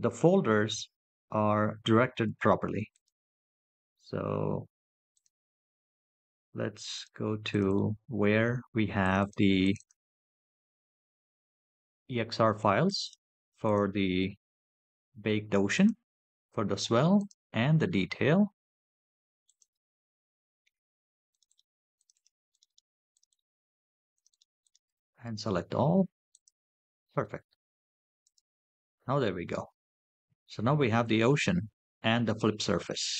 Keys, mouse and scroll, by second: 30.6 scroll down 2, 31.2-31.7 middle drag.